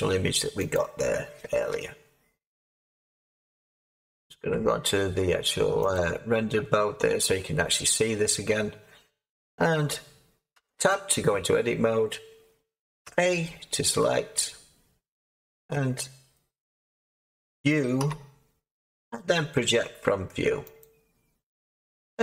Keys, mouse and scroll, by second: 0.7 click, 3.9-5.7 scroll, 5.7 scroll, 5.9 click, 10.5 Tab, 13.0 a, 17.9 u, 20.7-22.2 drag.